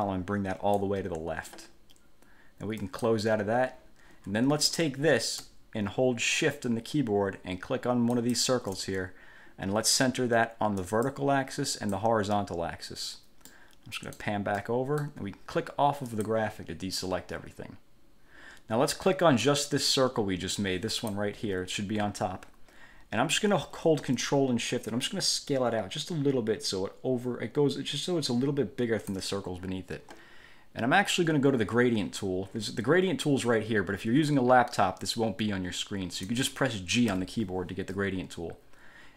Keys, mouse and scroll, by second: 0.1 click, 3.0 click, 8.3 shift+click, 11.0 click, 11.9 click, 13.6 middle click, 14.8 middle click, 16.2 click, 19.6 click, 20.7 click, 21.6 ctrl+z, 25.3-29.5 ctrl+shift+drag, 37.3 g.